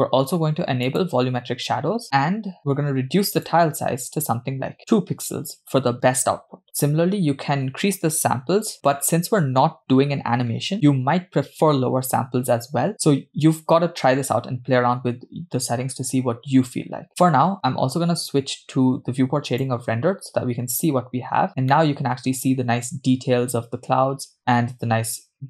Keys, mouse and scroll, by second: 1.0 click, 3.3-5.0 drag, 19.9 click, 21.8 middle click, 22.8-23.3 scroll up 1.